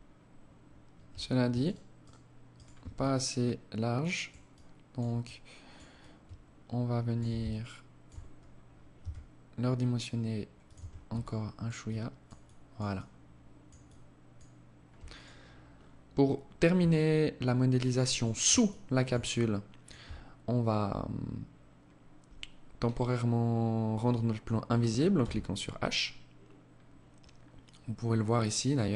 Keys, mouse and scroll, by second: 0.8 alt+shift+right click, 1.2 alt+shift+right click, 1.8 alt+shift+right click, 2.2 alt+click, 3.7 alt+click, 4.4 alt+click, 5.2 alt+click, 6.6 alt+shift+click, 7.5-7.8 scroll down 3, 8.2 s, 10.0 Tab, 10.4 alt+click, 11.0 alt+click, 11.6 alt+click, 12.2 alt+click, 13.0 alt+click, 14.4 right click, 15.0-15.3 scroll down 5, 16.1 alt+click, 17.8 alt+shift+click, 18.5 alt+click, 24.4 h, 27.9 click.